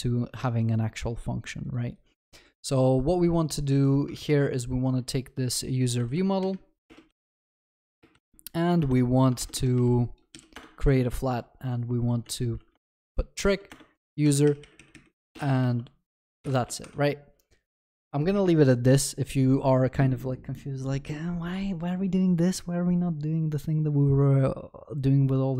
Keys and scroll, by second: 4.2 ctrl+c, 7.4 ctrl+v, 9.4 Return, 10.5 Return, 15.6 ctrl+s.